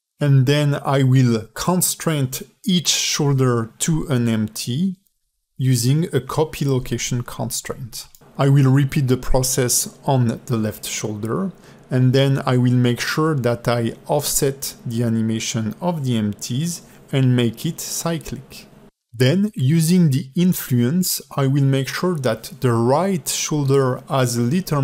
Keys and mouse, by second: 0.4 click, 1.4-2.7 drag, 8.8 space, 9.3 space, 9.8 ctrl+Tab, 10.8 alt+shift+middle click, 10.9 ctrl+alt+middle click, 11.3 a, 11.5 g, 12.5 space, 12.7 ", 15.2-19.4 typing, 21.3 alt+middle click, 22.0 space, 22.3 space, 23.0 click, 23.2 click, 23.4 ctrl+Tab, 23.7 click, 24.3-24.8 drag.